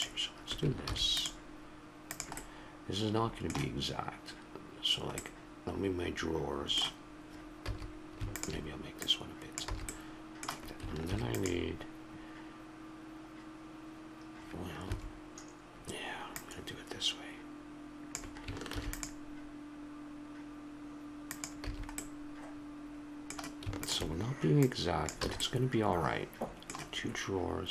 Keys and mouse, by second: 0.8 ctrl+r, 5.2-7.6 middle drag, 7.6 a, 8.3-9.9 drag, 9.7 a, 9.9 middle click, 10.7 click, 11.0 ctrl+r, 16.3-18.7 drag, 18.7 ctrl+r, 21.7 a, 23.8-25.4 drag, 25.2 a, 25.4-26.6 middle drag.